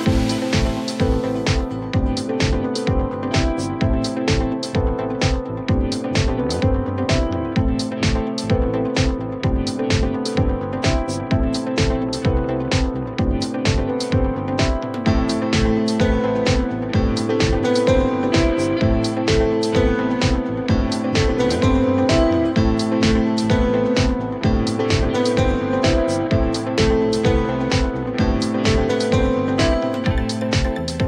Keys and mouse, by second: 0.2-1.2 drag, 1.8 w, 2.4-4.0 drag, 4.4 alt+middle drag, 4.8 r, 5.4-6.3 drag, 6.7-8.1 drag, 6.7 w, 8.6 alt+drag, 9.1-9.9 alt+drag, 10.3-10.6 alt+drag, 11.0 click, 12.0 alt+middle drag, 12.4-13.8 alt+drag, 15.0 click, 16.5 click, 16.9-18.5 shift+drag, 19.3 click, 20.3 click, 20.5-21.8 shift+drag, 23.6 click, 26.0 alt+click, 27.4 click, 28.0 click, 28.6 alt+x, 29.2-30.0 alt+drag, 30.5 alt+click.